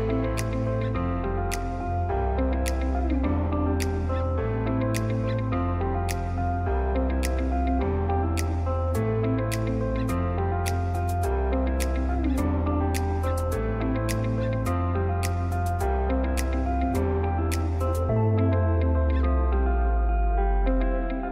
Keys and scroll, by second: 0.1 space, 0.5 g, 3.8 space, 4.1 F3, 4.5 Escape, 6.9 F2, 8.4 Escape, 9.2 F3.